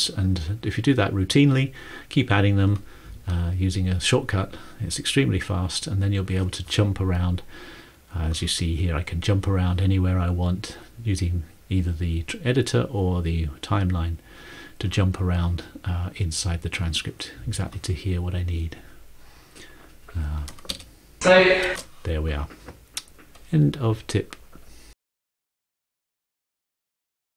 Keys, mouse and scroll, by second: 7.9 click, 9.1 click, 20.9 ctrl+space.